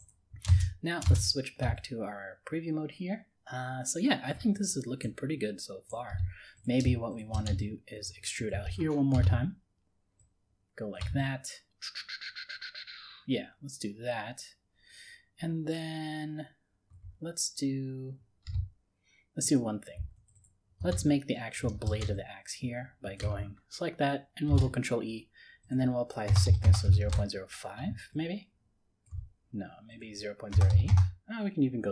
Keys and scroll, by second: 9.1 ctrl+e, 24.5 ctrl+e.